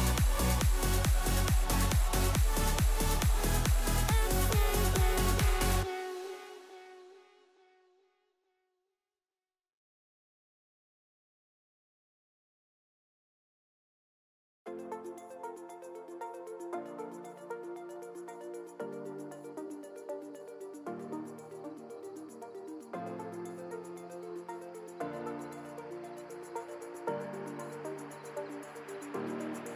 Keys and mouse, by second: 1.2 Tab, 1.4 middle click, 2.4 shift+click, 5.3-6.3 drag, 8.2 click, 11.0 click, 12.3 click, 12.8-13.6 drag, 14.0 click, 14.5 click, 15.7 click, 16.3 a, 19.3-19.8 drag, 20.7 click, 21.2 alt+click, 21.7 click, 22.5-23.1 right drag, 24.0 drag, 24.7 alt+click, 26.0-26.4 middle drag, 26.9 shift+click, 28.2 shift+middle click, 29.5-29.7 alt+shift+middle drag.